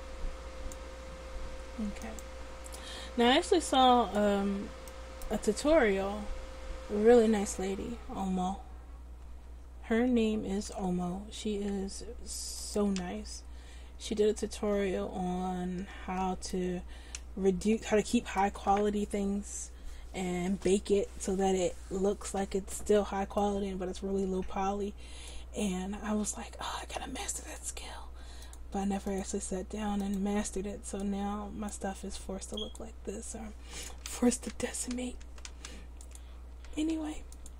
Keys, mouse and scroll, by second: 2.1-3.7 drag, 10.7 g, 13.1 ctrl+z, 14.8 Tab, 16.0 Tab, 28.5 click, 34.1 ctrl+z, 35.5 ctrl+z, 36.9 ctrl+z.